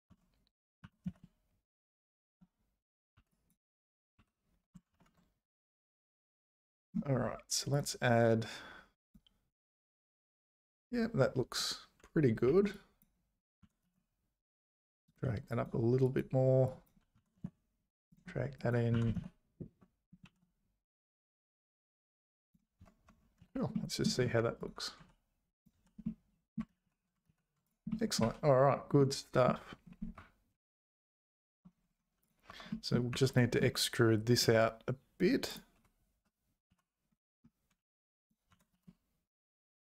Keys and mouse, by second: 0.1 Tab, 0.8 g, 3.1 1, 3.4 click, 4.2 2, 4.9 ctrl+b, 7.8 ctrl+b, 12.5 1, 12.9 click, 13.6 g, 15.6 click, 16.1 click, 16.6 click, 17.2 g, 18.7 click, 18.9 g, 23.1 Tab, 23.4 z, 23.8 middle click, 25.0 h, 25.7 h, 26.0 middle click, 26.7 ctrl+z, 26.8 ctrl+z, 27.3 ctrl+z, 27.9 middle click, 28.2 `, 29.0 middle click, 30.2 `, 32.5 Tab, 32.7 middle click, 33.1 3, 34.4 e, 35.8 `, 36.7 z, 37.8 1, 38.1 click, 38.5 g.